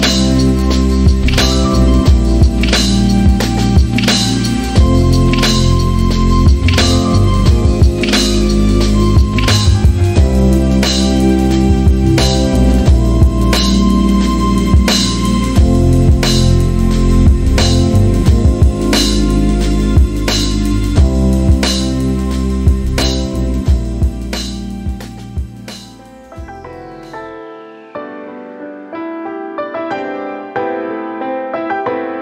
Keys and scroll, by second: 8.6 shift+f, 9.9-11.0 typing, 26.0-29.4 typing, 30.2 Left, 30.3 Left, 31.1 e, 31.4 Return.